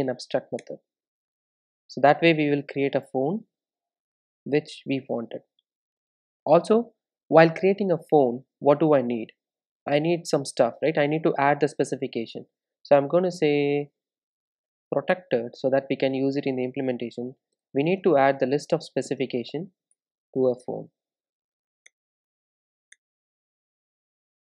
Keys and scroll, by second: 0.0 alt+Return, 3.6 super+s, 13.0 Return, 20.0 Return, 20.6 Return, 22.3 alt+Return.